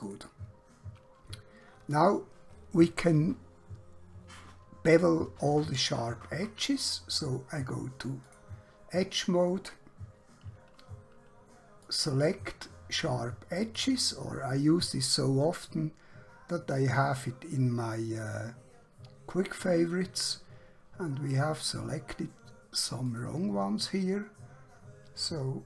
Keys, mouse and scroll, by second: 8.1 click, 11.8 click, 17.9 scroll up 1, 18.5 scroll down 1, 20.6 scroll up 1, 21.3 scroll down 1, 23.0 click.